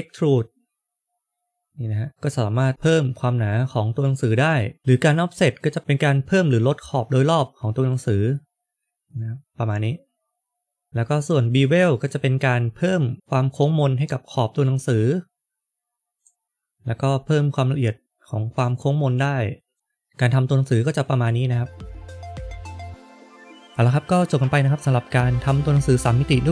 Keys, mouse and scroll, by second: 0.8 click, 12.0 click, 16.4 scroll up 1, 16.4 click, 19.7 middle click.